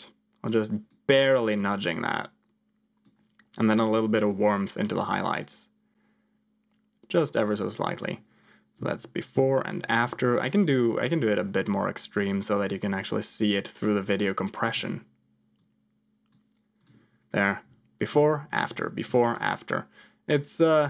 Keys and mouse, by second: 1.6-3.0 drag, 4.2-7.3 drag, 7.9 click, 8.7 m, 9.3 m, 10.9-14.6 drag, 15.5 click, 17.5 m, 18.1 m, 18.6 m, 19.1 m, 20.6 click.